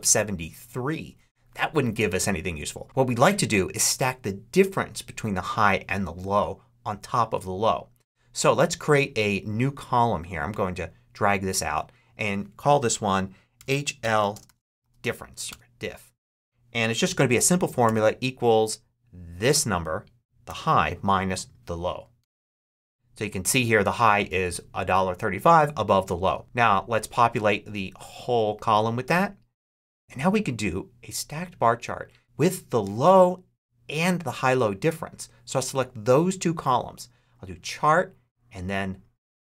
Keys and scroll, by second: 13.2-15.1 typing, 15.4 Return, 17.7 =, 20.3 -, 22.1 Return.